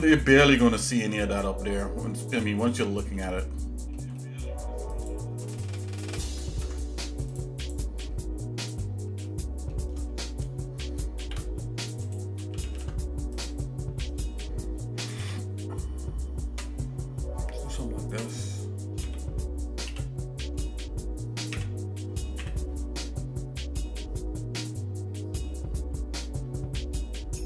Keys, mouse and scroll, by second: 0.2 middle click, 0.7 shift+middle click, 1.2 middle click, 1.7-2.7 scroll up 6, 2.7 shift+middle click, 3.4 middle click, 4.2 middle click, 4.9 click, 5.5 shift+middle click, 6.5 ctrl+Tab, 7.6 click, 8.1 shift+middle click, 8.8 shift+middle click, 9.5 shift+middle click, 11.2 shift+d, 12.6 ctrl+z, 12.8 ctrl+z, 13.4 click, 15.2 i, 19.0 s.